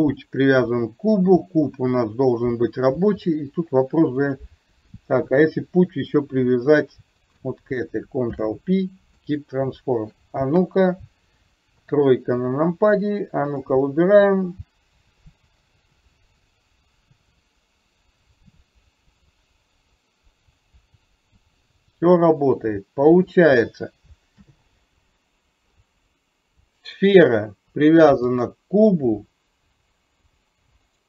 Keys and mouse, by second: 4.4 click, 5.4 shift+click, 8.2 ctrl+p, 10.6 KP_1, 11.8 KP_3, 13.5 click, 14.6-23.4 drag, 24.5 ctrl+z, 27.0 click, 28.4 click.